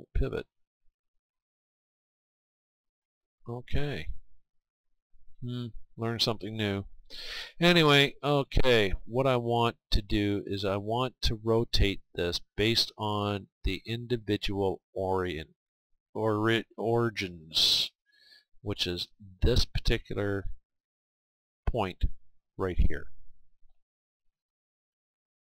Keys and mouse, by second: 4.9 click, 5.5-11.6 drag, 21.1-23.0 right drag, 24.3 r.